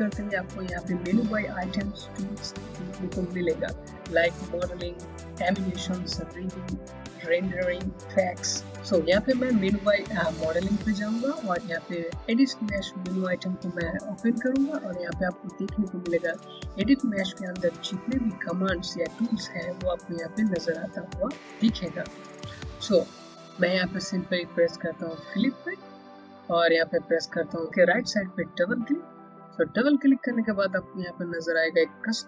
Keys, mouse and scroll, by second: 11.2-12.2 scroll down 1, 13.6 click, 14.6-16.3 scroll down 1, 20.6-21.6 scroll up 1, 22.3-24.5 scroll down 1, 25.5 click, 28.6 click.